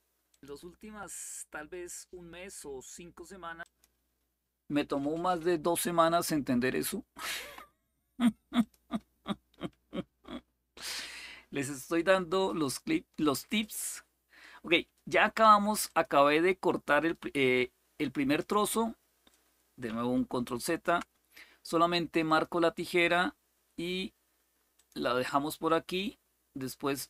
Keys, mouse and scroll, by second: 0.0 click, 3.4 click, 8.3 click, 10.5 click, 12.4 click, 13.3 click, 15.6 click, 20.2 ctrl+z, 22.0 click, 24.5 click.